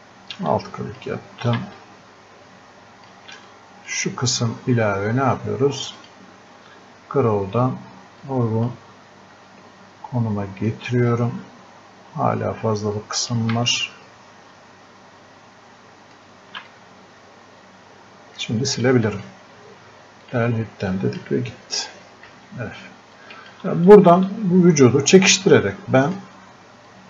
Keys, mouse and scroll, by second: 8.3 click, 9.2-9.7 scroll up 1, 10.7-16.7 drag, 16.7-20.3 ctrl+drag, 22.3 f, 23.2-27.0 drag.